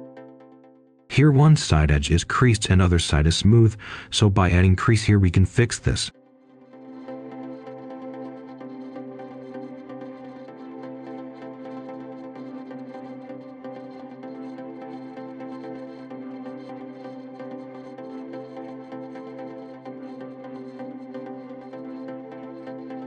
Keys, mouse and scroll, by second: 0.9-2.6 drag, 2.6 right click, 3.6-4.7 scroll up 1, 4.8 ctrl+shift+click, 5.6-6.7 typing, 6.9 Tab, 7.3 scroll down 1, 7.6 right click, 8.0 click, 10.0 scroll down 1, 10.3 right click, 10.5 Tab, 13.0 scroll up 1, 13.2 right click, 14.2 scroll down 1, 14.4-16.2 right drag, 16.7 click, 18.0 scroll down 1, 18.2 scroll up 1, 18.5 right click, 18.9 scroll up 1, 19.0 right click, 19.5-20.9 typing, 21.5 scroll down 1, 21.8 right click, 22.9 click.